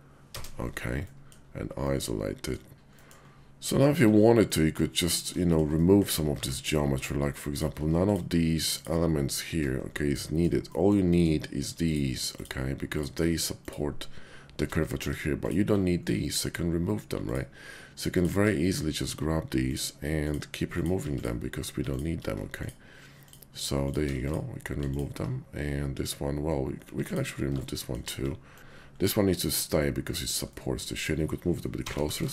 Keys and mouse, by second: 0.9 click, 1.7 middle click, 2.7 ctrl+z, 2.9 click, 3.0 middle click, 3.8 shift+click, 4.4 middle click, 5.4 shift+click, 5.7 middle click, 6.2 Tab, 7.5 alt+click, 8.0 alt+shift+click, 10.1 middle click, 10.7-11.9 shift+drag, 12.3 shift+click, 12.8 shift+click, 13.5 shift+click, 14.9 x, 16.1 click, 20.2 shift+click, 20.6 shift+click, 21.0 x, 22.5 shift+click, 23.1 shift+click, 24.7 alt+x, 26.9 x, 27.6 shift+click, 28.6 ctrl+z, 28.6 x, 29.0 click, 30.5 click, 31.8 g, 31.9 g.